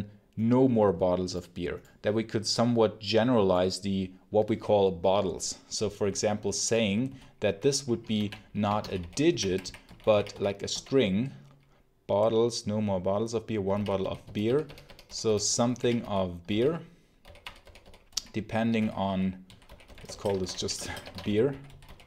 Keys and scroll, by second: 7.0 n, 8.1-11.1 typing, 13.3-22.0 typing.